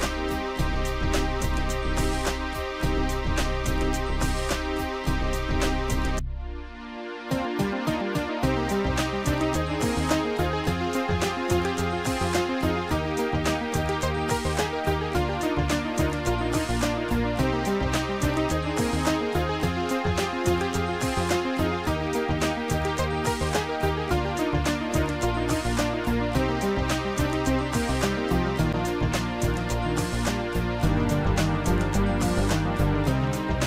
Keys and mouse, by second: 1.9 click, 5.3 click, 6.6 click, 8.8 click, 10.1 click, 11.6 shift+click, 13.1 shift+click, 13.4 shift+click, 14.0 shift+click, 15.7 shift+click, 17.6 shift+click, 24.8 Delete, 24.8 click, 30.7 click.